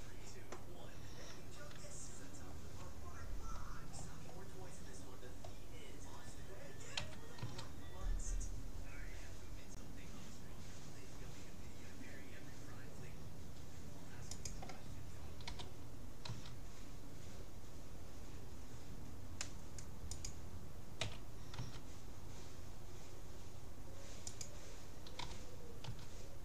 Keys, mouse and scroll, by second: 2.1-5.0 middle drag, 4.0 scroll down 1, 5.0-6.2 drag, 7.0 s, 15.5 g, 21.0 s, 25.2 g.